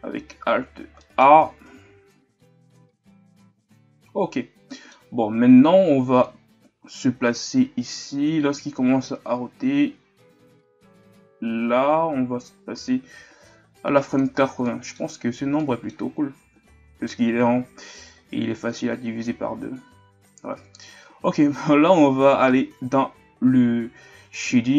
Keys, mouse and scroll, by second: 0.5-1.0 scroll down 3, 1.0-1.4 middle drag, 1.4-2.0 shift+scroll up 5, 4.0 alt+a, 4.7-5.1 middle drag, 5.1-5.7 scroll up 2, 6.4-14.6 drag, 14.6-15.1 middle drag, 15.1-15.6 scroll up 2, 15.6-16.1 middle drag, 16.1-23.4 scroll up 5, 23.4-24.4 scroll up 1, 24.4 scroll up 1, 24.6 click.